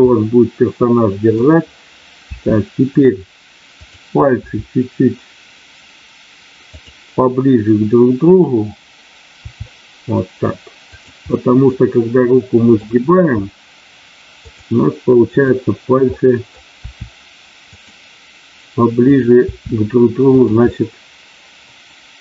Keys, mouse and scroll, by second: 2.3 r, 2.8 click, 3.8 click, 4.4 r, 9.4 r, 11.2-12.9 middle drag, 13.0 r, 15.3 click, 16.0 middle click, 16.7 r, 17.7 click, 19.0 click, 19.5 r, 20.7-22.2 middle drag.